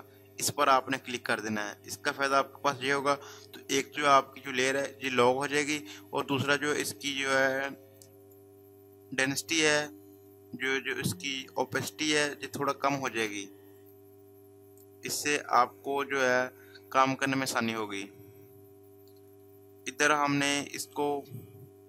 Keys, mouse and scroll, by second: 8.1 click.